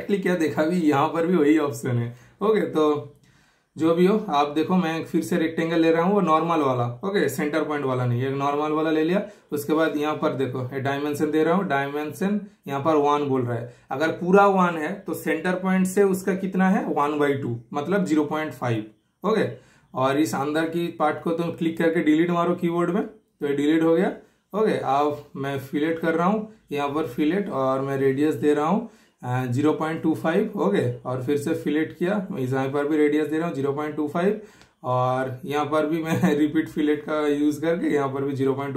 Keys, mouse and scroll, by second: 0.7-1.9 super+middle drag, 0.9 typing, 3.6 super+click, 3.6 typing, 5.5 super+click, 6.7 super+click, 7.4 super+right click, 7.9 super+click, 9.1 super+click, 10.3 super+right click, 11.2 super+click, 12.5 super+click, 13.1 super+Return, 13.5 super+scroll up 1, 13.7 super+scroll down 1, 14.4 super+click, 15.6 super+/, 16.2 super+Return, 17.1 super+right click, 17.5 super+click, 18.4 super+middle click, 18.7 typing, 19.4 super+click, 20.7 super+Delete, 25.2 super+click, 29.9 super+Return, 31.9 super+click, 34.4 super+Return, 35.2 typing, 35.8 super+Return, 36.8 super+click.